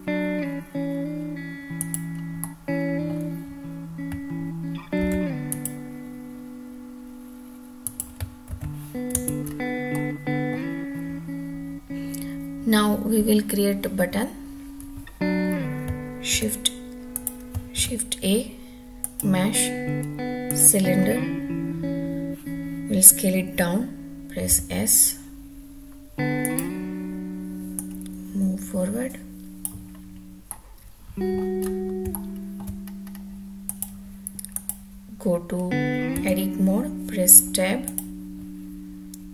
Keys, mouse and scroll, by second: 2.0 click, 2.5 middle click, 5.1 ctrl+r, 8.0 click, 8.7 ctrl+z, 9.3 Tab, 9.6-10.0 scroll down 1, 10.0-10.7 middle drag, 10.7 click, 17.1 click, 17.8 shift+a, 21.4-21.7 scroll down 1, 24.4 s, 26.4 click, 27.8-29.6 drag, 30.5-31.3 middle drag, 31.6 scroll up 1, 32.1-32.6 shift+middle drag, 32.8-33.6 scroll up 3, 33.6 click, 34.5 click, 36.1 Tab, 37.9 click.